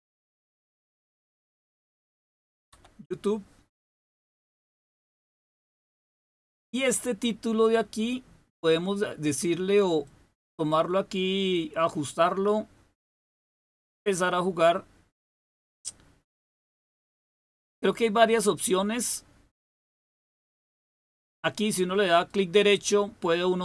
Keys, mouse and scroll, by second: 0.0-0.2 typing, 1.3-3.2 typing, 4.8 click, 10.0-13.7 drag, 14.1-16.7 drag, 18.6-20.6 drag, 22.1 right click.